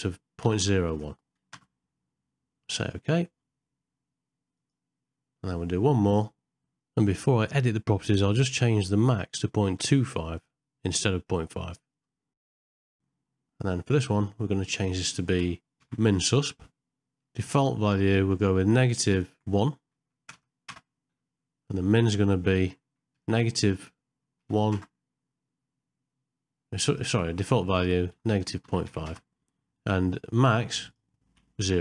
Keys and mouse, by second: 6.3 click, 9.3 click, 13.9-31.8 drag.